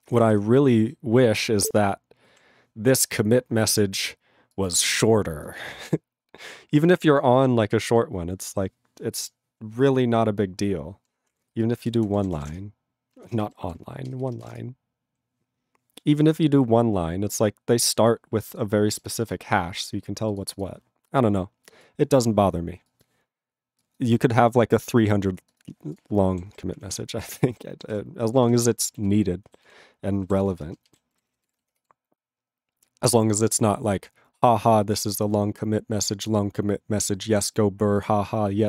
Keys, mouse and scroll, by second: 25.6 q, 25.9 click, 26.0 click, 26.5 ctrl+s, 26.8 ctrl+p, 26.8 ctrl+e, 27.0 ctrl+space, 27.5 ctrl+alt+b, 27.5 ctrl+g, 27.9 ctrl+s, 28.5 ctrl+s, 28.6 ctrl+e, 29.1 ctrl+s, 29.6 ctrl+s, 30.5 ctrl+space, 31.0 ctrl+alt+b, 31.4 ctrl+s.